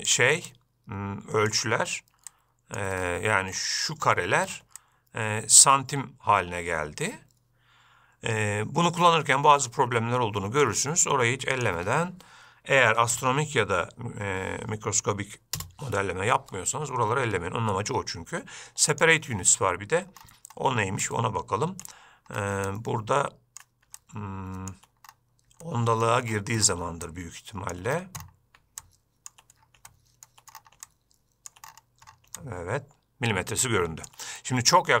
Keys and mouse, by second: 0.0-0.4 ctrl+drag, 0.8-1.9 shift+drag, 2.6 shift+click, 5.2-11.0 shift+drag, 11.9-17.3 drag, 19.3 click, 21.4 shift+right click, 23.0-23.6 ctrl+right drag, 23.6 ctrl+click, 24.3 shift+click, 26.0-26.4 shift+middle drag, 27.4 shift+click, 29.2 shift+click, 30.3-30.6 shift+middle drag, 31.2 shift+right click, 32.8 shift+right click, 33.1-34.4 shift+drag.